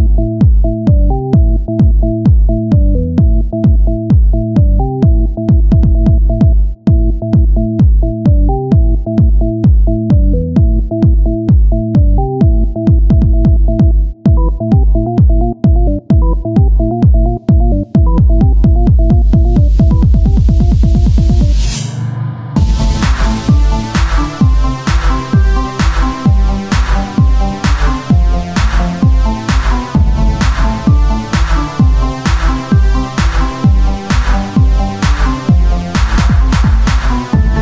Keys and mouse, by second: 0.2 KP_1, 0.6 z, 1.4 g, 4.0 z, 5.9 ctrl+r, 7.7 Tab, 13.5 KP_1, 16.0 z, 20.1-23.1 z, 23.1-24.5 drag, 23.3 shift+a, 25.1 s, 26.2 z, 27.5 z, 31.3-33.2 drag, 33.2 s, 34.7 KP_1, 35.4 z.